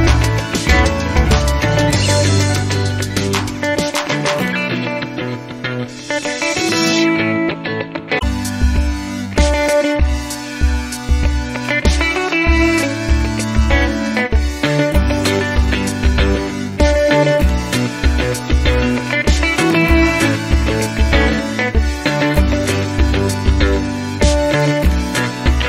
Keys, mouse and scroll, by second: 0.5 click, 0.9-1.4 scroll down 2, 2.7 click, 4.4 click, 5.7 1, 6.0 0, 13.1 click, 14.0-15.0 typing, 16.3-18.7 drag, 19.2 click, 21.3 click, 22.2-25.6 drag.